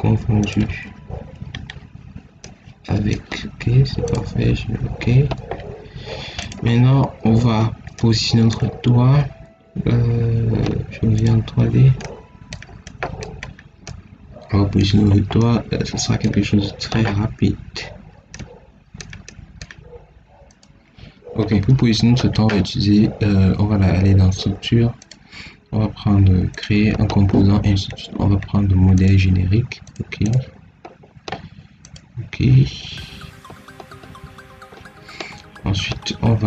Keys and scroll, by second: 0.5 ctrl+x.